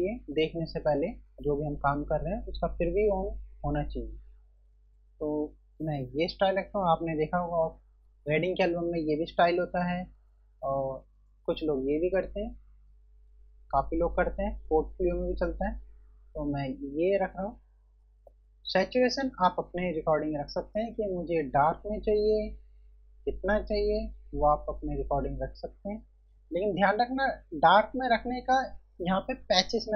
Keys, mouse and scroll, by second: 3.9 F1, 10.2 click, 20.7 click.